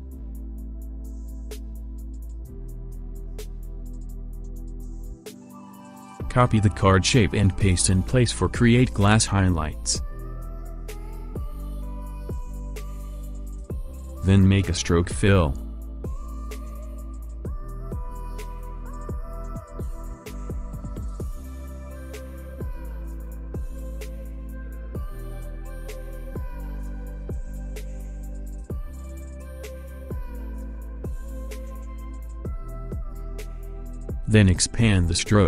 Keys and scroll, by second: 0.9 7, 1.2 0, 1.9 Return, 21.2 3, 25.7 4, 30.6 alt+space.